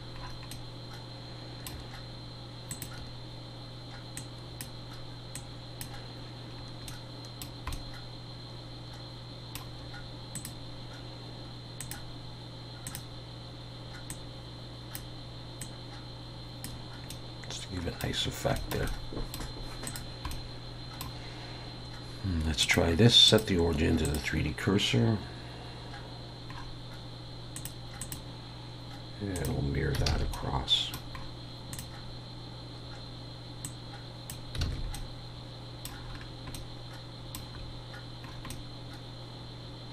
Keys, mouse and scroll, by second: 0.2-0.7 scroll up 4, 0.5 middle click, 2.7 click, 6.6 scroll down 1, 6.9 middle click, 10.4 click, 17.1 middle click, 18.2 scroll down 2, 18.6 shift+middle click, 18.9 middle click, 19.9 click, 20.3 middle click, 22.6 click, 26.5 scroll up 2, 27.6 click, 27.6-28.0 scroll up 2, 30.1 alt+a, 30.3 middle click, 31.2-31.7 scroll up 1, 31.7 click, 31.7 scroll up 1, 34.6 alt+a, 34.9 middle click, 36.0-36.6 scroll down 4, 36.5 middle click, 37.3-37.8 scroll up 1, 38.5 middle click, 38.5 scroll up 3.